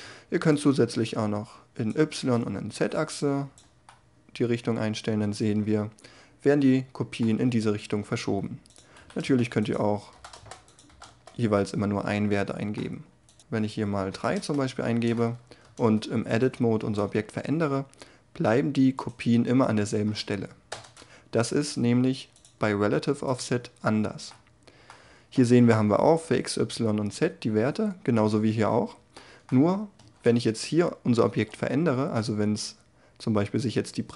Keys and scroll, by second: 9.2 Return, 10.1 0, 10.3 Return, 10.9 0, 11.1 Return, 14.1 3, 14.3 Return, 15.6 Tab, 16.8 g, 20.7 Tab, 29.5 Tab, 31.3 g.